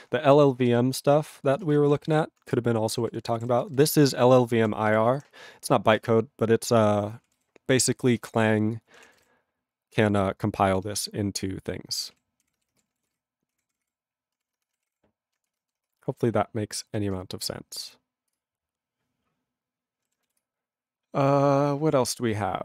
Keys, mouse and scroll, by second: 2.6 ctrl+Return, 2.9 ctrl+=, 3.5 ctrl+space, 3.6 ctrl+n, 3.7 ctrl+n, 4.6 ctrl+n, 4.8 ctrl+g, 6.1 ctrl+space, 6.6 ctrl+p, 7.2 ctrl+p, 7.3 ctrl+g, 12.9 ctrl+g, 18.3 Return, 20.4 Return.